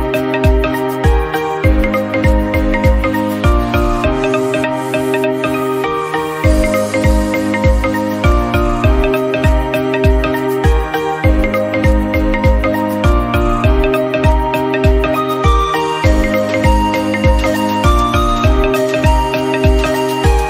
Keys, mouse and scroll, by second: 0.6 scroll down 2, 0.7 middle click, 1.2-1.6 scroll up 1, 1.6 g, 2.2 middle click, 2.7 KP_1, 3.8 shift+middle click, 4.7 e, 5.5 e, 8.0 middle click, 8.7 g, 9.5 KP_1, 9.9 shift+middle click, 10.5 e, 11.0 e, 12.4 scroll down 1, 12.6 shift+middle click, 12.8 scroll up 2, 13.0 click, 14.0 g, 15.7 click, 16.0 click, 16.3 g, 17.0 scroll down 2, 17.2 shift+middle click, 17.5-18.3 scroll up 2, 18.5 scroll down 1, 18.6-19.8 shift+middle drag, 19.8 Tab, 20.0 click, 20.1 click.